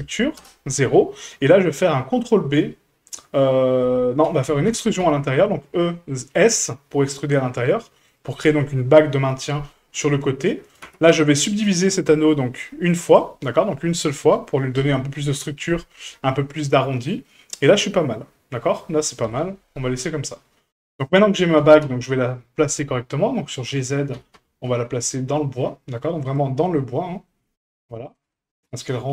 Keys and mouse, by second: 1.2 middle click, 4.7 e, 10.8 Tab, 12.2-13.2 drag, 16.7-17.2 middle drag, 17.7-18.8 middle drag, 19.2 KP_1, 21.6 g, 23.1-23.6 shift+middle drag, 24.1 g, 26.8 middle click, 27.8-28.1 shift+middle drag, 28.3 middle drag.